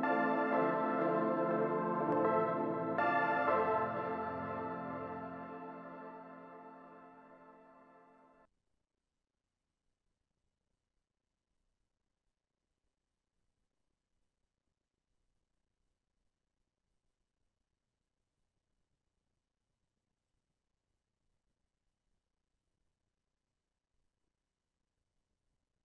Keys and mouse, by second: 0.7 middle click, 2.2 2, 2.8-5.0 drag, 6.3-8.6 drag, 10.0-11.0 drag, 11.4 f, 13.2 f, 13.7 click, 15.0 click, 16.9 f, 17.4-20.2 drag, 20.4-25.8 drag, 23.7-25.2 middle drag.